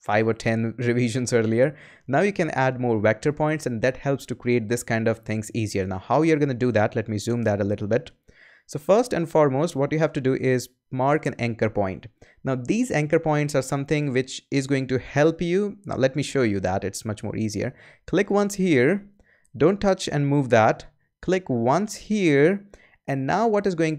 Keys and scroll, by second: 7.1 super+=.